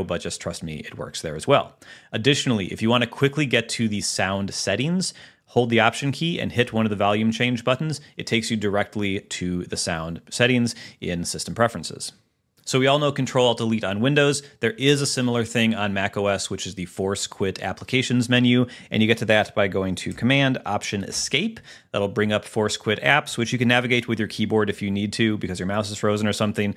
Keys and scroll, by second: 21.3 alt+super+Escape, 23.7 Up, 24.5 Down.